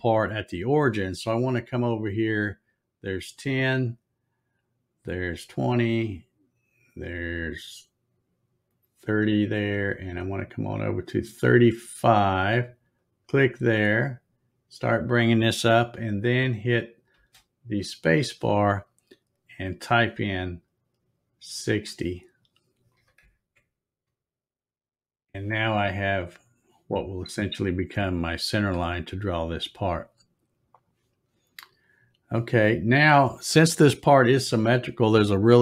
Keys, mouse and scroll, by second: 13.0-17.3 drag, 26.1-26.4 scroll up 3, 26.2 middle click, 27.0 scroll up 1, 27.6 scroll down 1, 28.5-28.9 scroll up 2, 30.7 click, 31.4 scroll up 1, 32.0 scroll up 1, 32.6 scroll down 1.